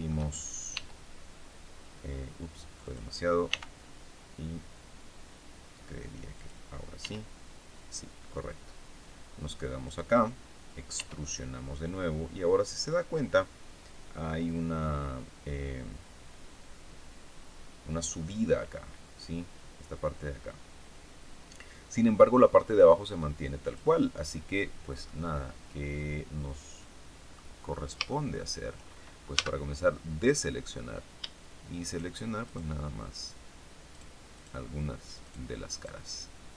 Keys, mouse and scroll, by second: 0.7 e, 2.7 click, 3.4 r, 6.3 click, 6.9 e, 9.7 click, 10.9 e, 23.6 click, 24.9-27.5 middle drag, 27.5-27.9 scroll up 1, 28.0 shift+middle click, 29.3 a, 31.8 shift+right click, 32.4 shift+right click, 33.9 shift+right click, 34.3 shift+right click, 35.1 shift+right click, 35.7 shift+right click.